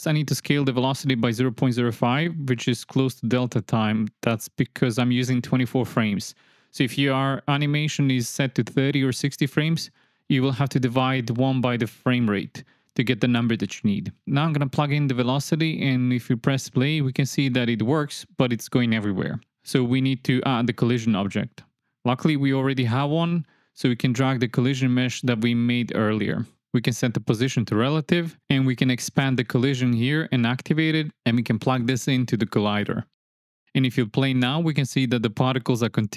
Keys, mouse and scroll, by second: 0.3 click, 1.6 click, 2.8 click, 3.2 click, 7.6-10.8 drag, 17.1-17.9 drag, 18.2 space, 19.0 space, 22.2 shift+Left, 24.6-25.1 drag, 25.9-26.4 drag, 27.2 click, 28.9 click, 30.0 click, 33.4 space.